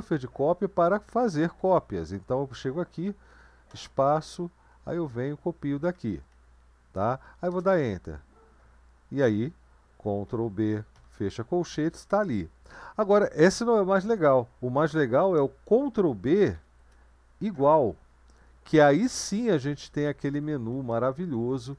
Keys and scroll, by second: 0.0 Right, 0.7 Right, 0.7-1.1 Right, 1.7 Right, 2.3 Right, 2.5 Right, 2.5 Up, 2.8 Up, 2.9 Up, 3.2 Down, 3.7 space, 4.1 Right, 4.8 Right, 4.9 Right, 5.0 Right, 5.1 Right, 5.2-6.0 Right, 6.3 Left, 7.5 Return, 10.3 ctrl+b, 10.9 ], 13.5-15.3 BackSpace, 16.5 ctrl+b, 17.5 =, 19.0 Down, 19.2 Down, 19.4 Down, 19.5 Down, 19.7 Down, 20.3 Down, 20.7 Up, 20.9 Up, 21.1 Up, 21.3 Up, 21.5 Up.